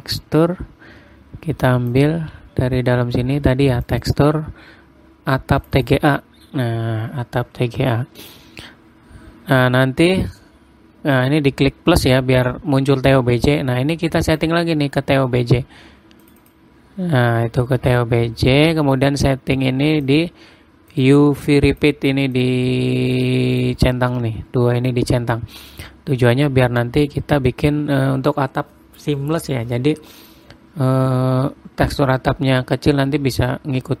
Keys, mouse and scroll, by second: 0.5-2.2 scroll down 13, 2.4 click, 2.9-4.3 scroll, 10.7 click, 14.8 click, 19.4 click, 21.4 click, 22.9 click, 24.1 click.